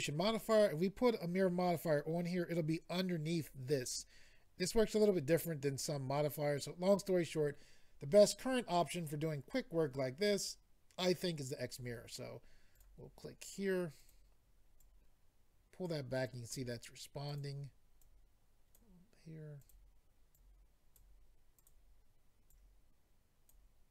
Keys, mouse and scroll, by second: 12.7 click, 12.8 click, 14.0 click, 17.2 click, 17.4 click, 18.0 click, 19.6 click, 19.7 click, 20.3 click, 21.6 click, 21.7 click, 22.5 click.